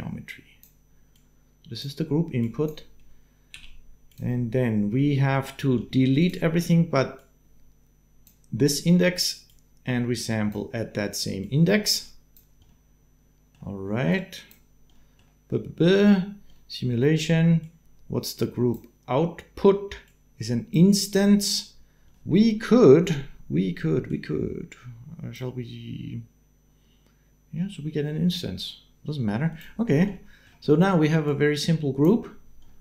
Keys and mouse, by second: 0.9 click, 3.3 g, 4.8 click, 5.7 click, 6.0 click, 6.9 click, 7.9 click, 9.3-10.3 drag, 11.2-12.5 drag, 12.7 middle click, 13.9 click, 14.9 middle click, 16.5 middle click, 17.4-18.7 drag, 19.8 click, 21.2-22.3 middle drag, 23.9-25.1 drag, 29.3 click, 30.1 click, 31.0-32.1 drag.